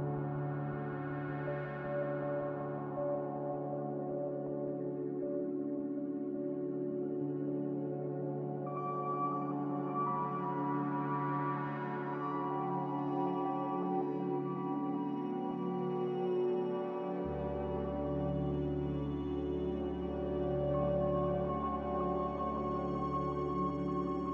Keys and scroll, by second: 5.3 ctrl+z, 5.6 ctrl+z, 5.9 ctrl+z, 18.2 ctrl+z, 23.9 a.